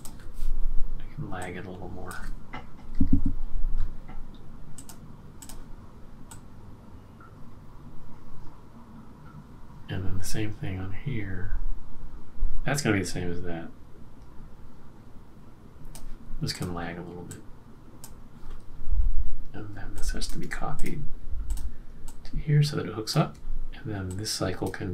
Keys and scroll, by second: 2.8 Up, 2.9 Up, 3.0 Up, 3.1 Up.